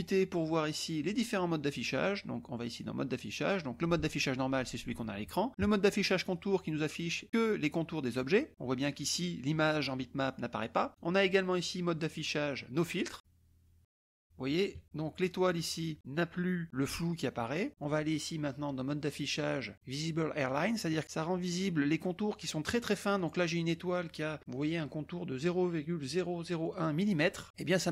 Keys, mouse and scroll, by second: 0.6 click, 6.2 click, 11.0 click, 13.3 click, 13.4 KP_Add, 15.1 KP_Add, 17.8 click, 20.5 click, 20.6 KP_Add, 23.1 click, 27.7 click.